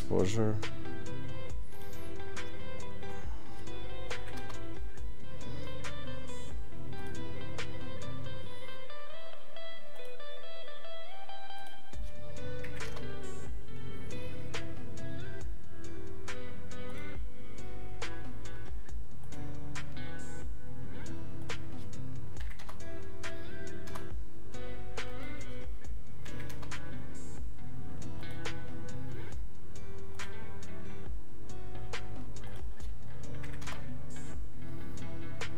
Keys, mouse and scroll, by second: 1.8 click, 4.2 click, 7.0 click, 9.9 click, 11.6 click, 21.4 click, 22.6 right click, 25.0 click, 28.2 click.